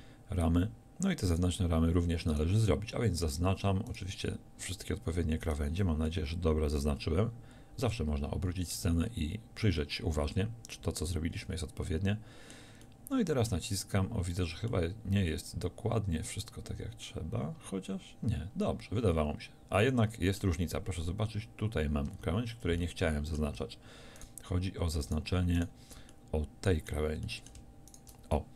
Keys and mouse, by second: 6.1-8.1 drag, 8.1-15.8 middle drag, 15.8-17.1 drag, 17.1-22.9 middle drag, 24.2-28.5 drag.